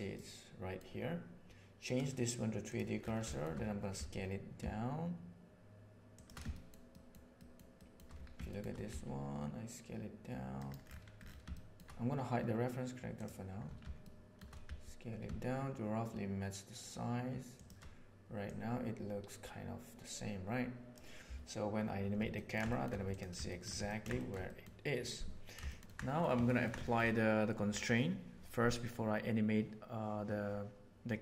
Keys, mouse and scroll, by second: 0.1-0.7 middle drag, 1.9-2.7 right drag, 3.3 shift+middle click, 3.9 s, 6.4 middle drag, 7.0 shift+middle click, 7.4 shift+middle drag, 7.9 shift+middle click, 8.4 shift+middle click, 8.8 s, 11.4-11.8 shift+middle drag, 14.1-14.4 shift+middle drag, 14.6 s, 18.4-20.4 drag, 20.4-20.9 right drag, 22.3 ctrl+middle click, 22.7 shift+middle click, 23.4 shift+middle drag, 23.8 ctrl+middle click, 24.1 shift+middle click, 24.4 middle click, 25.6 shift+middle click, 25.8 ctrl+z, 26.0 middle click, 26.4 ctrl+middle drag, 26.8 shift+middle click.